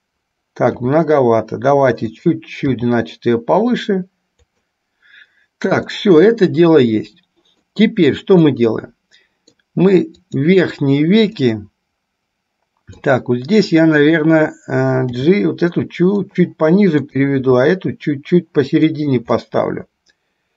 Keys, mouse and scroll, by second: 0.8 r, 2.7 g, 6.1-8.0 middle drag, 8.6-9.7 middle drag, 10.5 click, 11.6-13.5 middle drag, 15.2 g, 17.6 g, 19.6-20.5 middle drag.